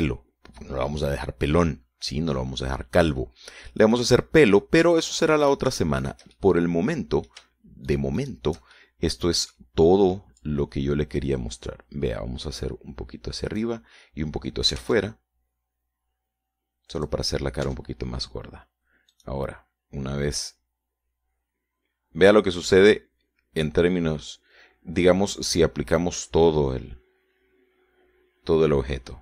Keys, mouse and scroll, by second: 0.6-5.6 middle drag, 6.0 middle click, 6.9 shift+right click, 7.5 shift+right click, 7.8-9.0 shift+middle drag, 9.4 shift+right click, 10.2 shift+middle click, 11.9-15.3 drag, 16.0-16.8 typing, 18.4 click, 18.8 scroll down 1, 19.1 Tab, 20.6 right click, 21.9-29.2 drag.